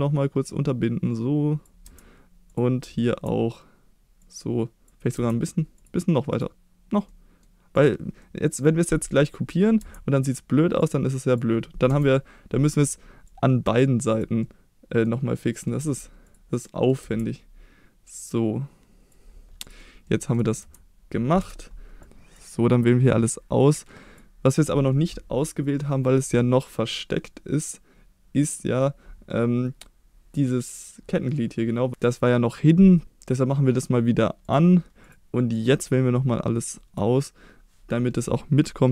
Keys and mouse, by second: 1.9 Tab, 2.5 click, 2.8 Tab, 4.3-4.9 drag, 5.2 Tab, 5.8 click, 6.4-7.1 drag, 7.1-7.4 middle drag, 7.8 click, 8.2-8.5 middle drag, 9.8 Tab, 10.8-11.4 drag, 11.9 KP_1, 13.3 click, 14.1 click, 14.4 middle click, 15.5 middle click, 15.8 Tab, 16.3 click, 16.7 middle click, 17.0 Tab, 18.1-19.1 drag, 19.6 click, 20.6 Tab, 21.4 KP_1, 22.0-22.4 drag, 22.5-24.2 drag, 34.4 click, 35.6-37.0 drag.